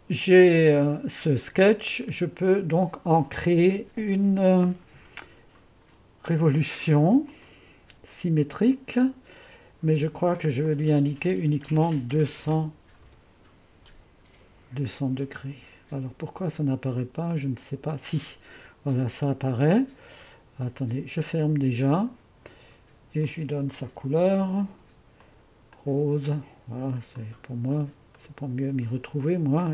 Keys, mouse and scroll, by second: 1.4 click, 1.9-2.5 scroll up 1, 7.3-11.6 drag, 12.2 2, 12.5 0, 13.1 0, 17.3-19.7 drag, 20.8 click, 22.2-23.3 drag, 23.5 click, 24.3 ctrl+d, 25.3-29.7 drag.